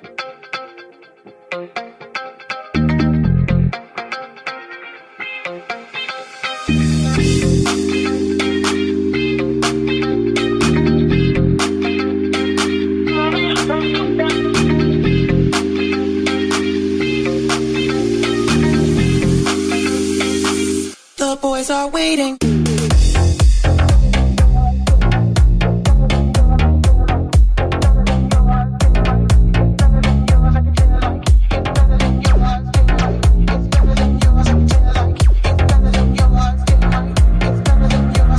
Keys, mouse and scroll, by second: 0.3 shift+click, 0.3-1.8 shift+middle drag, 1.1 j, 1.8 click, 1.9 shift+middle click, 2.3 shift+click, 2.4 shift+middle click, 2.6 j, 3.3 right click, 3.3-4.3 shift+middle drag, 4.3 right click, 4.4 shift+middle click, 5.3 right click, 5.3-6.7 middle drag, 5.9 g, 6.7 right click, 6.7-7.9 middle drag, 7.2 j, 7.9 right click, 7.9 middle click, 8.6 g, 9.7 shift+right click, 10.3 j, 10.6 right click, 10.9 middle click, 11.1-14.5 middle drag, 11.8 g, 14.7-20.8 shift+middle drag, 15.2 g, 16.9 ctrl+KP_Add, 17.8 g, 19.7 g, 20.8 right click, 20.8-27.4 ctrl+middle drag, 21.2 ctrl+KP_Add, 22.1 g, 25.9 ctrl+KP_Add, 26.4 ctrl+KP_Add, 26.8 alt+z, 27.2 click, 27.2 right click, 27.8 alt+z, 29.0 ctrl+KP_Add, 29.0 g, 29.9-31.6 ctrl+middle drag, 30.2 ctrl+KP_Add, 30.8 g, 31.8-38.3 middle drag, 35.9 r, 36.9 g.